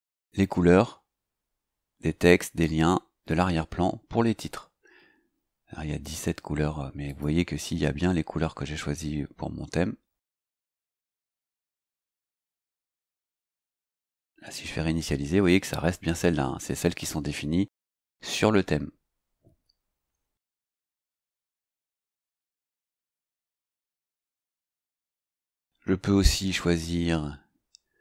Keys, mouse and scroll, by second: 7.0 click, 10.2 click, 12.8 click, 22.1 click, 24.8 click.